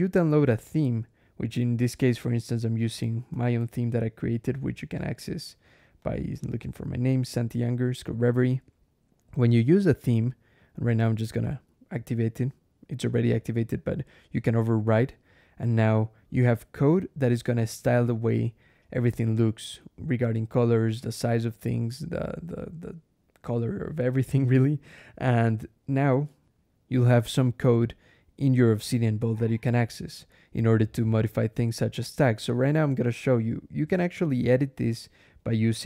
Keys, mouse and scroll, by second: 3.1 ctrl+,, 4.2 scroll down 2, 4.8 click, 5.8 click, 5.9-7.1 typing, 11.3 click, 14.2 click, 15.7 click, 16.7 scroll down 1, 17.3-17.6 scroll up 1, 22.3-23.1 scroll down 2, 23.2 scroll up 2, 23.9 click, 26.4 alt+\.